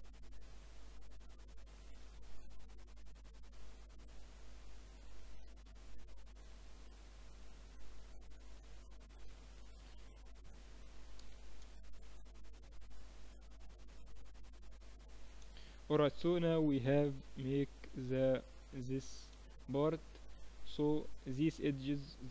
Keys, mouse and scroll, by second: 10.8 s, 15.4-17.8 middle drag, 17.8 Tab, 17.8 click, 20.5 Tab.